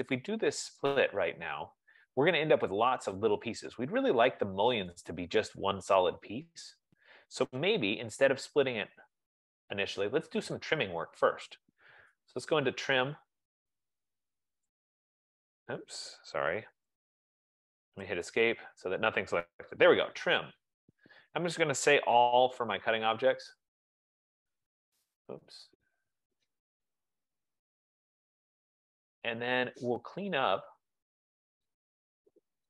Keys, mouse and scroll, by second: 0.3 click, 1.0 click, 9.7 Escape, 12.3-13.4 typing, 15.1 click, 17.1 ctrl+z, 18.1 Escape, 18.5 Escape, 18.6 Escape, 19.9-21.1 typing, 22.3-23.5 typing, 25.2 right click, 27.6-28.3 typing, 30.4 click, 31.7 click.